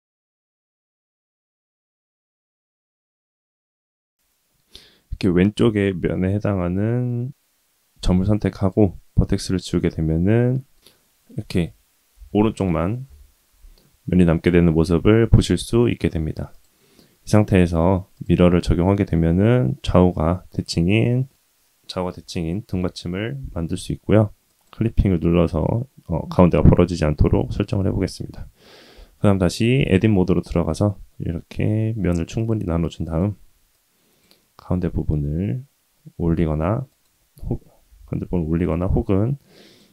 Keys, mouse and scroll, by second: 0.5 1, 0.8 click, 1.7 middle click, 2.8 click, 6.1 middle click, 7.9 x, 9.2-10.7 middle drag, 12.1 KP_3, 13.0 KP_1, 14.9 Tab, 16.5-18.2 drag, 20.7-21.3 middle drag, 22.7 KP_1, 24.5 click, 28.9 Tab, 29.7 ctrl+r, 33.7 click, 34.6 g, 37.9 g, 39.0 click.